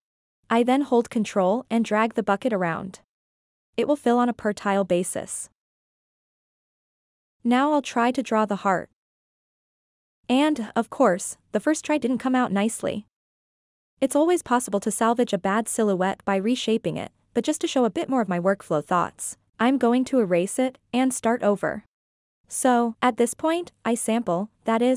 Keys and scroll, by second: 7.7 3.